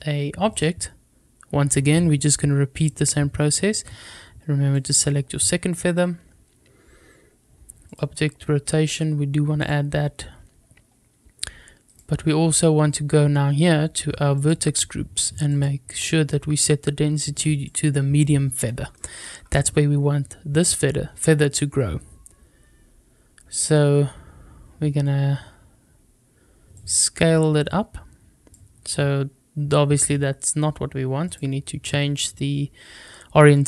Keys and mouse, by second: 2.7 click, 7.8 click, 11.8 click, 14.3 click, 15.4-17.7 drag, 18.9 shift+middle click, 26.7-28.4 drag, 31.3-32.0 drag, 33.5-33.6 drag.